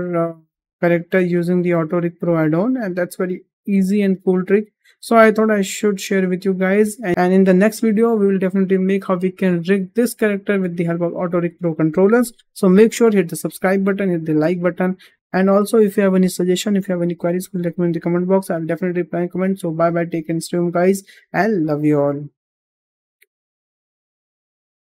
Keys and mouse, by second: 2.4 middle drag, 3.2 middle drag, 3.8 click, 4.9 g, 21.5 middle drag.